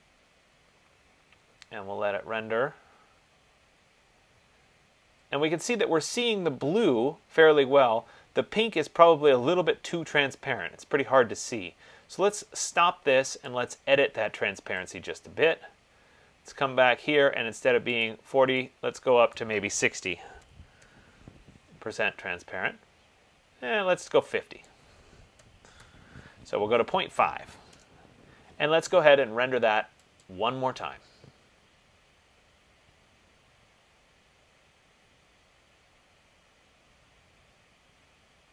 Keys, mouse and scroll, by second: 13.7 click, 15.1 click, 18.4 click, 19.6 click, 20.5-20.9 typing, 25.2 click, 25.5 ., 27.8 Tab, 30.5 click.